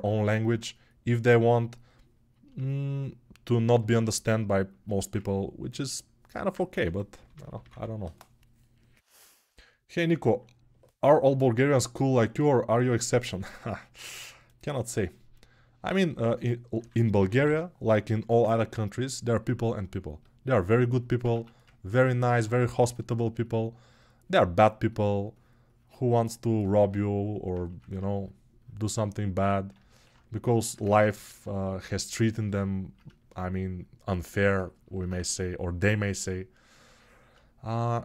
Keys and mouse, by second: 6.5 3, 17.8 [.